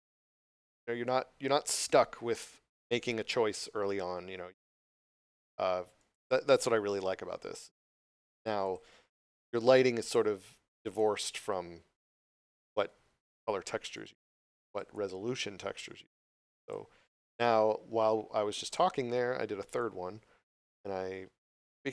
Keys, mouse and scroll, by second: 0.5 click, 6.0 click, 8.6 click, 10.9 click, 12.6 3, 13.9 click, 19.8 click.